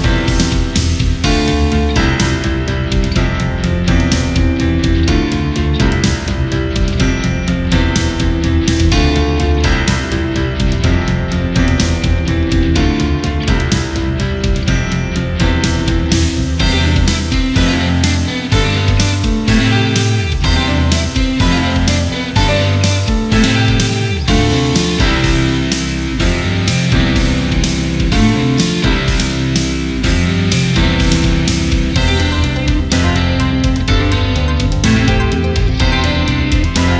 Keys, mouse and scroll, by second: 2.3 click, 3.5-8.5 drag, 10.5 click, 15.7 click, 16.2 alt+scroll up 1, 16.5 scroll down 1, 16.7-17.0 alt+scroll up 1, 17.8 click, 18.5 click, 20.9 alt+scroll up 1, 21.3 scroll down 1, 22.8 scroll up 1, 23.0-25.8 drag, 26.8 ctrl+z, 27.3 alt+scroll up 1, 27.9 scroll down 1, 29.3 alt+scroll down 1, 30.1 alt+scroll down 1, 32.3 alt+scroll up 1, 33.1 alt+scroll down 1, 34.5 click, 34.6-35.0 scroll down 3, 35.6 alt+scroll up 1, 36.1 click, 36.4 alt+scroll down 1.